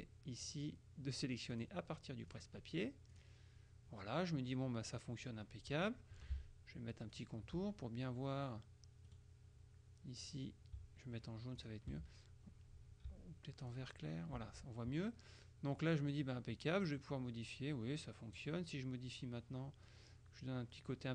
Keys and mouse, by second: 0.5 click, 1.6 click, 2.4 click, 3.2 click, 5.0 click, 7.2 shift+click, 9.2 right click, 10.4 click, 11.7 shift+click, 13.8 shift+click, 17.0-19.0 drag, 20.0-21.1 drag.